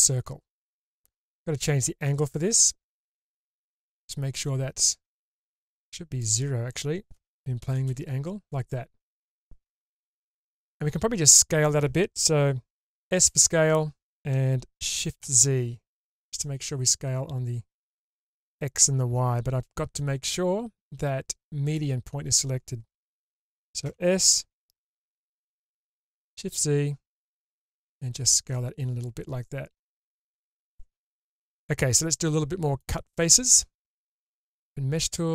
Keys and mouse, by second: 2.7-6.2 drag, 6.7-8.3 drag, 10.3-11.6 middle drag, 13.0 s, 20.3-21.7 drag, 23.8 s, 32.1 middle click, 34.6 click.